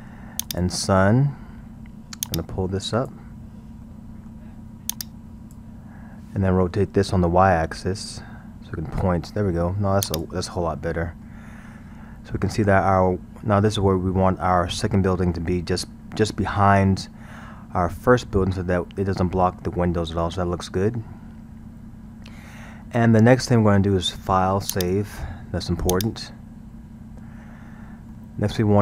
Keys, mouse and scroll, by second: 2.3-3.9 drag, 3.9-4.9 middle drag, 4.9-5.9 drag, 5.9-7.8 scroll, 7.8 r, 10.5-11.7 middle drag, 11.7-12.1 scroll, 12.5-14.6 middle drag, 14.6 scroll, 20.2-24.8 middle drag, 24.8-27.7 drag, 27.7 scroll, 28.1-28.8 middle drag.